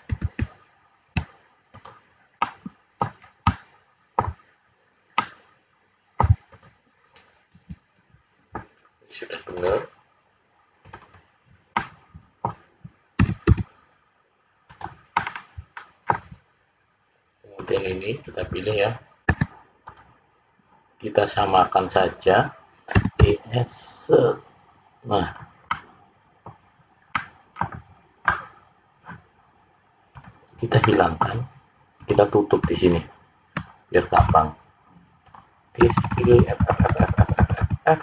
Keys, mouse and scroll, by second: 0.2 ctrl+z, 1.6 click, 2.4 middle click, 4.1 middle click, 5.1 middle click, 6.5 click, 7.0-8.0 scroll down 3, 10.5 click, 10.7 click, 11.0 click, 11.7 middle click, 13.2 e, 15.1 middle click, 17.5 click, 17.7 click, 19.2 `, 21.4 click, 22.9 e, 25.7 middle click, 27.1 middle click, 30.1 click, 30.8 middle click, 31.9 click, 32.8 shift+click, 34.2 f, 35.2 click, 35.8-37.6 typing.